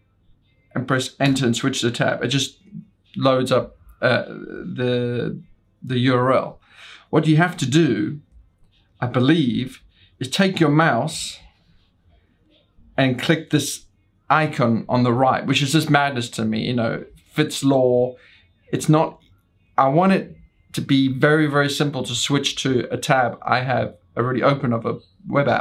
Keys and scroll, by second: 0.0 Down, 2.3 Return, 9.5-10.8 typing, 12.6 ctrl+l, 12.6 typing.